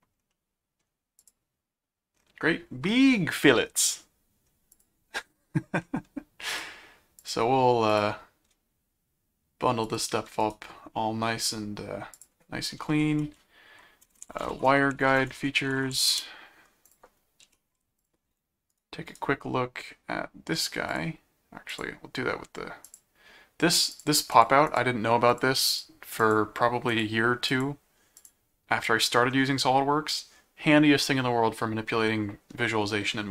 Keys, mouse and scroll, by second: 0.3 middle click, 1.2 click, 3.9 middle click, 4.7 ctrl+click, 6.5 click, 7.2 click, 7.9 click, 9.8 shift+click, 10.7 right click, 12.1 click, 13.9-16.5 typing, 16.6 scroll up 1, 16.8 ctrl+click, 17.4 ctrl+7, 18.0 click, 18.7 right click, 20.9 click, 21.7 click, 22.8 click, 23.9-25.2 drag, 26.9 click, 28.0 click, 28.2 click, 29.0 middle click.